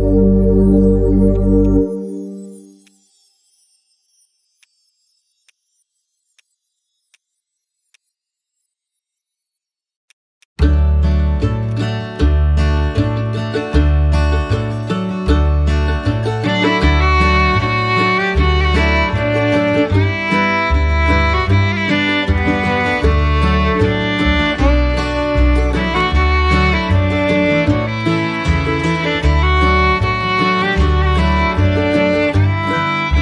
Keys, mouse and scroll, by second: 10.4 right click, 29.7 right click.